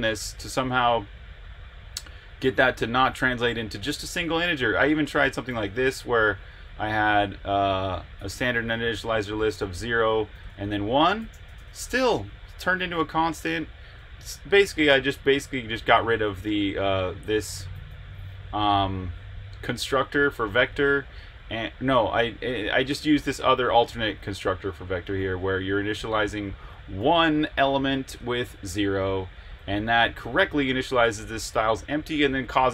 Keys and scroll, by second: 4.6 Escape, 4.6-11.7 typing, 15.0-18.4 typing, 21.4 j, 22.7-25.6 typing, 26.7-29.3 typing, 30.4-32.3 typing.